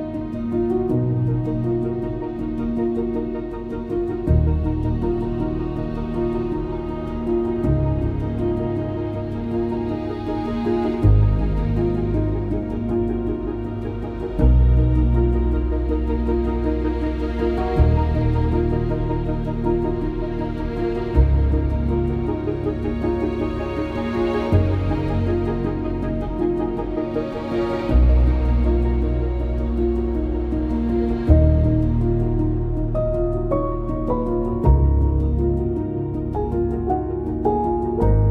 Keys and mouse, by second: 0.3 shift+click, 1.1 j, 2.1 shift+click, 2.9 j, 3.7 shift+click, 4.5 j, 5.6 shift+click, 6.5 j, 8.2 j, 8.6 click, 9.0 shift+click, 9.9 j, 11.6 click, 12.1 shift+click, 12.9 j, 13.6 2, 14.4 2, 14.7 click, 15.2 ctrl+x, 15.8 1, 17.5 j, 17.9 2, 18.5 ctrl+x, 18.8 1, 19.5 shift+click, 20.3 h, 21.0 ctrl+z, 21.9 j, 22.6 click, 23.9 j, 29.9 k, 31.3 click, 31.8 Return, 32.9 g, 35.5 g, 36.2 click, 36.3 2, 36.6 click, 37.3 ctrl+b, 38.0 click.